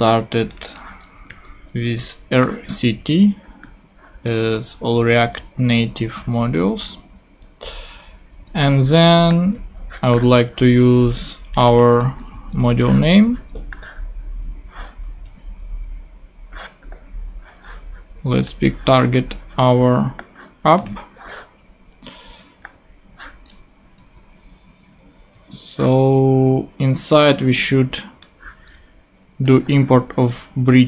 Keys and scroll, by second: 1.3 super+v, 3.1 super+Tab, 8.5 super+Tab, 12.3 super+c, 12.5 super+Tab, 15.2 super+v, 24.0 super+Tab, 30.7 super+c.